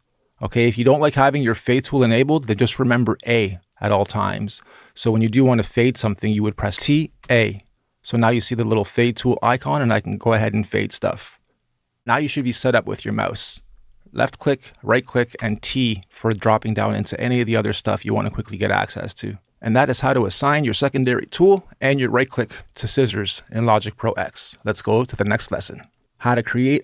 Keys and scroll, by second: 6.4-7.5 typing, 15.2 t.